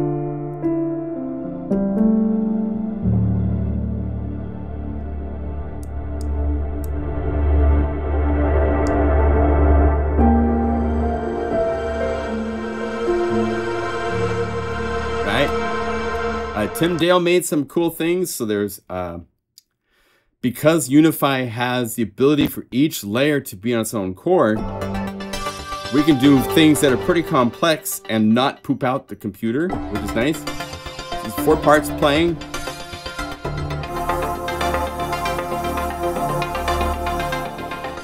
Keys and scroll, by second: 10.1 F5, 10.4 F4, 10.9 F5, 29.7 F3, 29.7 F4, 31.4 F3, 31.4 F4, 31.7 F3, 31.7 F4.